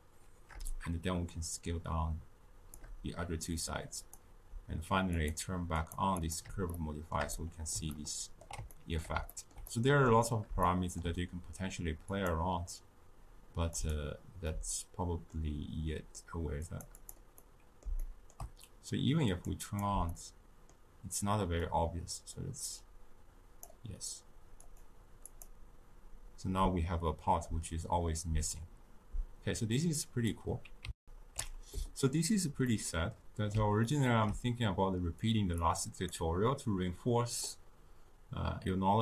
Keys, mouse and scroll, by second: 4.0 click, 5.1 click, 5.8 click, 6.1 click, 6.7-12.0 shift+middle drag, 12.0 click, 14.4-16.6 middle drag, 16.6 click, 16.9 click, 17.3-19.3 middle drag, 19.3 click, 19.6 click, 20.0-22.3 middle drag, 22.3-28.3 drag, 30.1 click, 30.9 ctrl+alt+shift+q, 32.6-35.1 middle drag, 35.1 click, 35.5-38.5 drag.